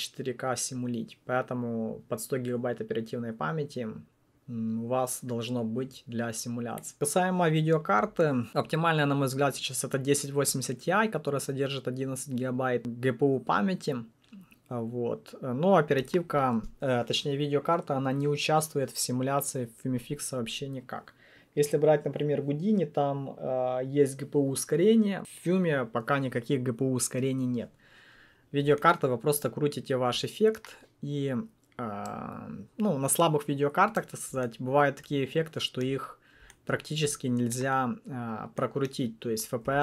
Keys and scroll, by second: 39.6 7.